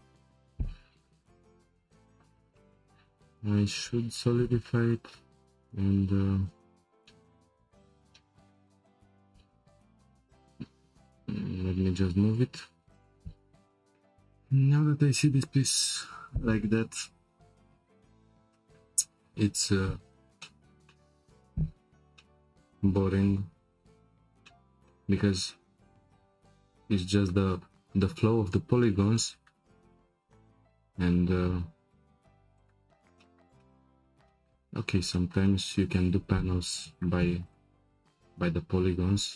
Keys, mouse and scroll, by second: 3.1-4.4 scroll down 2, 4.4-4.9 scroll down 1, 4.9 click, 6.4 click, 7.1-7.8 shift+middle drag, 7.8-8.2 scroll up 2, 8.2-9.9 shift+middle drag, 9.9 g, 13.8-16.8 shift+middle drag, 20.4-21.6 shift+middle drag, 21.6 Tab, 22.1-25.4 shift+middle drag, 25.4-26.3 scroll down 2, 26.3-27.0 scroll down 1, 27.0-27.7 scroll down 1, 27.7-28.3 scroll down 1, 28.3 scroll down 1, 28.8 shift+middle click, 29.7-30.3 scroll up 2, 30.3-31.0 scroll up 1, 31.0 2, 32.1 1, 32.5 click, 33.2-34.6 shift+middle drag, 34.6-35.1 scroll down 2, 35.1-36.4 shift+middle drag, 36.4 Tab, 36.9 click, 37.5 click, 37.9 Tab.